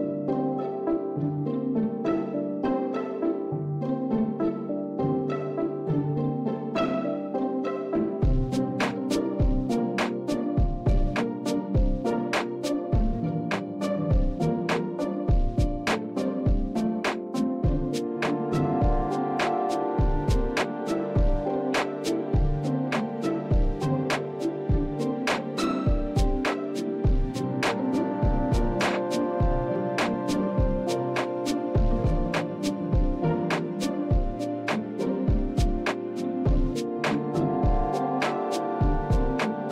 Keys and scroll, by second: 4.0 s, 6.4 shift+z, 9.6 shift+z, 10.5 shift+z, 15.7 ctrl+KP_3, 20.0 a, 21.2 e, 22.9 shift+z, 24.1 s, 34.0 shift+z, 34.9 Tab, 37.3 KP_1, 38.5 shift+z, 39.5 s.